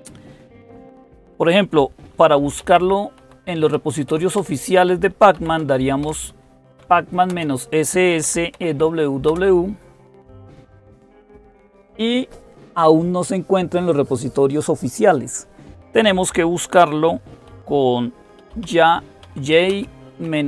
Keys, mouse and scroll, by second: 1.7-9.1 typing, 18.0-20.4 typing.